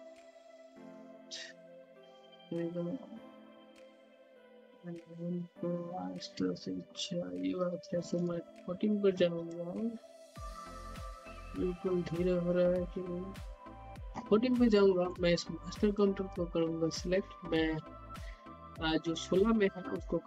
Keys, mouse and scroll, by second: 0.7-6.9 typing, 7.9-14.5 drag, 14.5 scroll down 1, 14.8 alt+middle click, 15.2-18.7 drag.